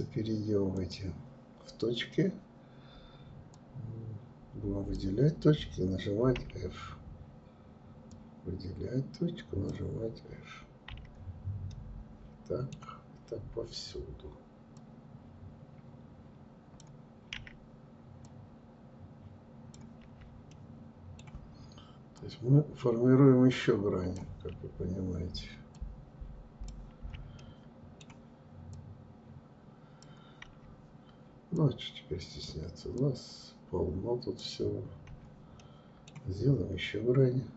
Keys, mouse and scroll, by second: 0.0-5.6 drag, 5.6 f, 7.3-10.0 drag, 10.0 f, 10.9-13.9 middle drag, 14.0-16.5 drag, 16.5 f, 17.5-19.2 drag, 19.2 f, 19.7-21.4 middle drag, 21.4-23.7 drag, 23.7 f, 24.9-26.1 drag, 26.1 f, 26.6-27.9 middle drag, 27.9-29.7 drag, 29.7 f, 30.7-34.3 drag, 34.3 f, 34.8-37.2 middle drag, 37.2-37.5 drag.